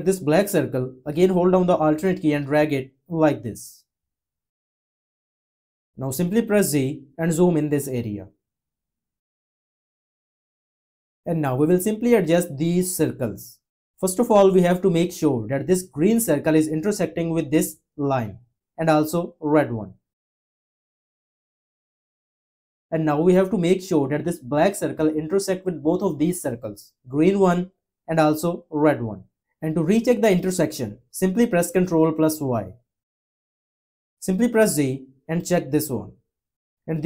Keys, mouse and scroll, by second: 1.9 click, 6.7 z, 32.0 y.